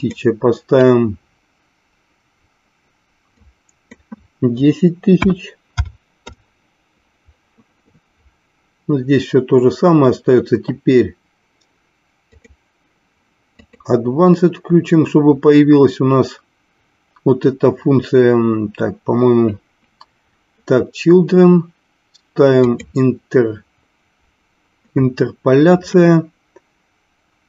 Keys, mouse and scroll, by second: 0.0-7.4 drag, 12.3 click, 13.8 click, 23.0 click.